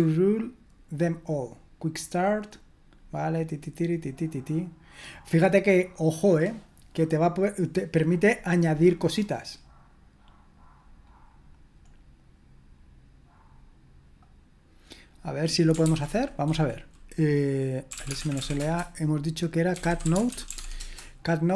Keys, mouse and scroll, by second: 2.0-3.9 drag, 3.9-11.0 scroll down 2, 11.0-11.8 scroll down 1, 11.8-15.1 scroll down 1, 15.1-16.1 drag, 15.8 ctrl+c, 17.6-20.9 typing.